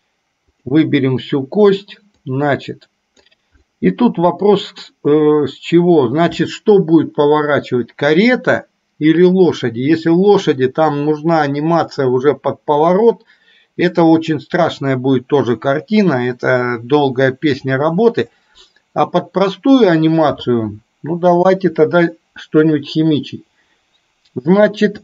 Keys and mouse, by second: 0.6 click, 2.2-3.2 drag, 3.7-4.8 middle drag, 21.6 KP_3.